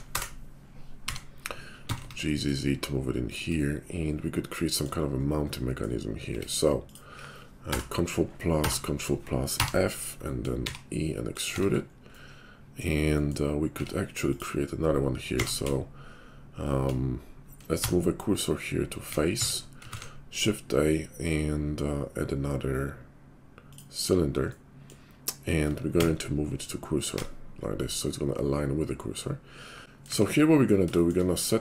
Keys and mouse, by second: 1.1 g, 6.3 Tab, 7.4-9.0 ctrl+drag, 7.6 ctrl+KP_Add, 8.6 ctrl+KP_Add, 9.0-25.5 middle drag, 9.5 f, 10.6 e, 11.5 Tab, 13.8 Tab, 15.2 q, 17.7 shift+s, 19.3 Tab, 19.9 shift+a, 25.5-27.2 shift+drag, 25.9 shift+s, 27.2-31.6 middle drag, 29.8 ctrl+z, 29.8 x, 30.1 `.